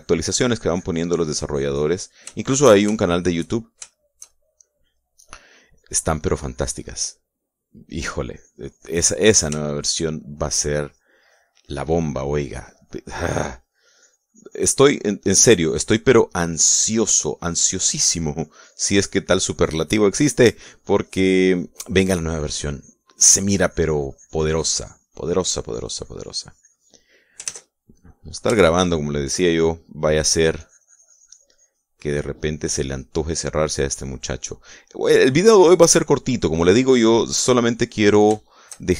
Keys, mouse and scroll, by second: 3.0 shift+middle click, 3.6 shift+middle click, 4.2-5.5 shift+middle drag, 5.8 middle click, 6.3-7.7 drag, 7.7 middle click, 8.5-10.2 drag, 10.8 shift+middle click, 11.4-13.2 drag, 14.0-16.6 drag, 17.2-20.4 drag, 20.8-27.8 drag, 20.8-27.8 right drag, 28.1 ctrl+s, 28.2 ctrl+click, 29.2 shift+click, 30.0 shift+click, 30.8-35.2 shift+drag, 35.9-38.4 drag, 38.4 middle click.